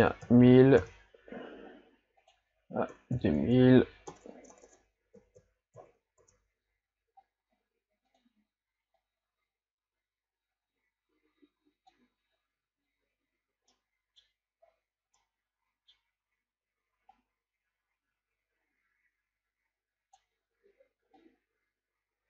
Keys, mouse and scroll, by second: 0.9 KP_0, 9.2 click, 13.8-14.6 middle drag, 14.6-15.1 scroll up 2, 15.1-17.3 middle drag, 17.3-20.5 drag, 21.3-22.2 drag.